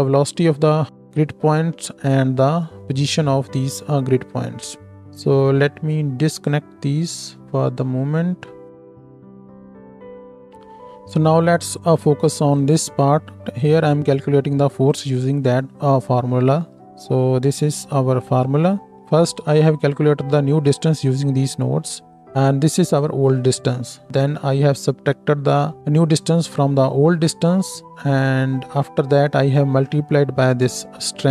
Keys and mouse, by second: 6.3-10.5 ctrl+middle drag, 6.3-10.5 ctrl+right drag, 12.5-15.0 middle drag, 12.5-15.0 right drag, 13.4 ctrl+space, 16.6 ctrl+space, 18.9-22.9 middle drag, 18.9-22.9 right drag.